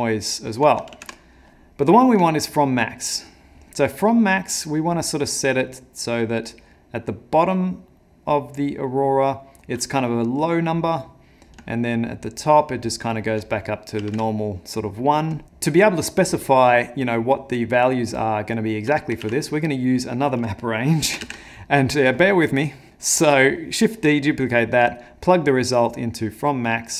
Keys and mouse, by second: 1.1 ctrl+z, 3.7 shift+click, 11.9 shift+click, 13.6 click, 15.4 middle click, 16.8 shift+click, 19.3 ctrl+z, 20.0 click, 21.3 shift+d, 22.9 middle click, 23.1 middle click, 25.0 click.